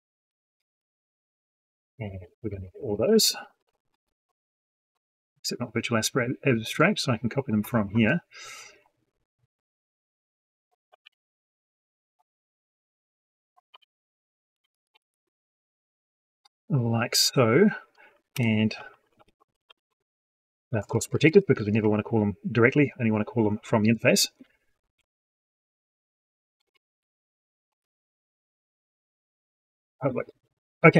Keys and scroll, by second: 3.3 ctrl+c, 10.8 ctrl+c, 13.6 ctrl+v.